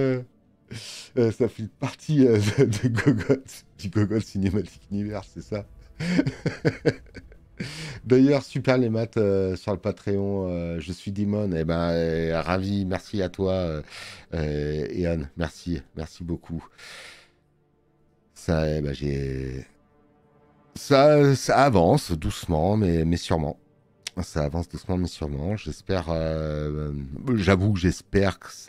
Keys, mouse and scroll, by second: 15.4 middle click, 20.1 space, 20.5 click.